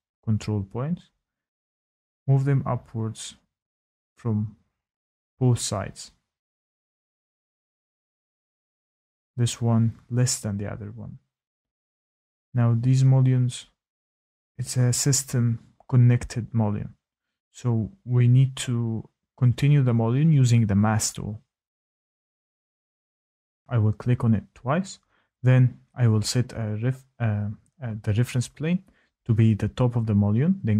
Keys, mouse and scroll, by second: 3.8 click, 5.0 click, 9.1-10.0 scroll, 10.5-13.7 scroll, 13.7 scroll, 14.2 click, 15.8 click, 16.5 click, 17.9 click, 18.4-18.8 typing, 19.7 click, 20.5 click, 23.6-23.9 scroll, 23.9 click, 24.5 click, 25.1 click, 28.2 click, 28.7-29.7 scroll, 29.7 scroll, 29.8 click.